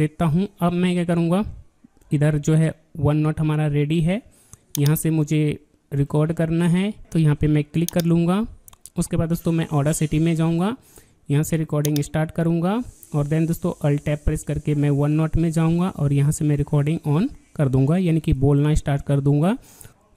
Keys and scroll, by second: 2.3 alt+Tab, 9.5 alt+Tab, 14.2 alt+Tab.